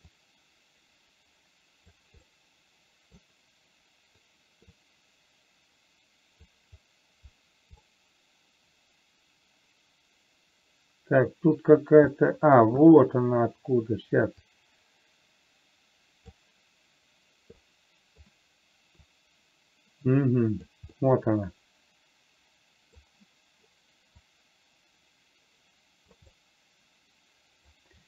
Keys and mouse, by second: 0.6-2.4 drag, 2.6 middle click, 5.3-6.9 drag, 8.3-11.9 middle drag, 12.5-12.9 middle drag, 14.9-16.6 drag, 18.0 middle click, 19.5-21.0 drag, 21.4-23.3 middle drag, 24.6-26.5 drag, 26.6-28.0 middle drag.